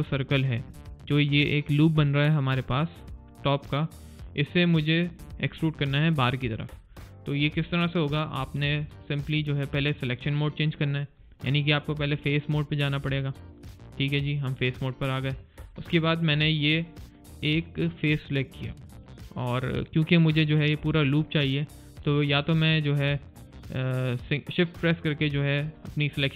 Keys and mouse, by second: 6.8 alt+click, 7.6 alt+middle click, 7.9 alt+click, 8.3 alt+middle click, 8.7 alt+click, 9.0 alt+right click, 9.3 alt+click, 9.7 alt+middle click, 12.1 right click, 14.1 click, 15.6 alt+click, 16.4 alt+click, 25.2 shift+click, 25.5 click, 25.9 click, 26.2 click.